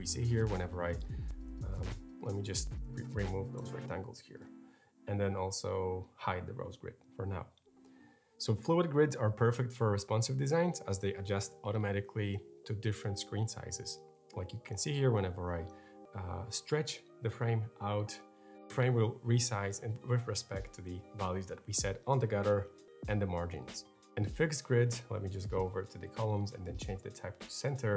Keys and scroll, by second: 1.1 super+z, 3.4 BackSpace, 23.8 super+z.